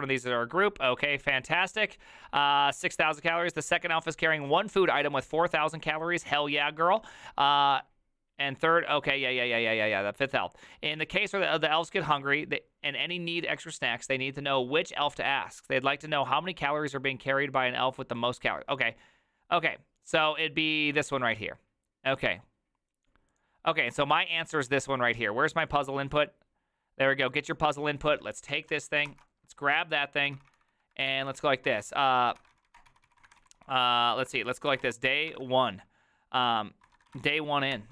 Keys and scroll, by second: 28.7 ctrl+a, 29.1 ctrl+c, 29.9 alt+{, 30.4 ctrl+c, 30.5 ctrl+c, 30.8-35.3 typing, 37.0-37.9 typing, 37.7 Return.